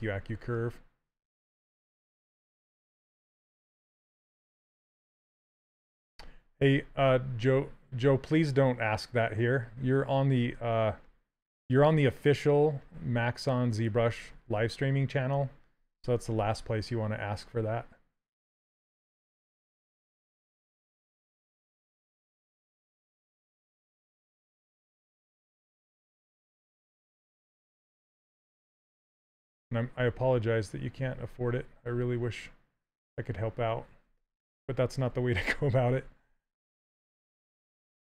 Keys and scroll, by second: 3.6 s, 10.4 s, 18.5 s, 23.9 s, 26.9 s.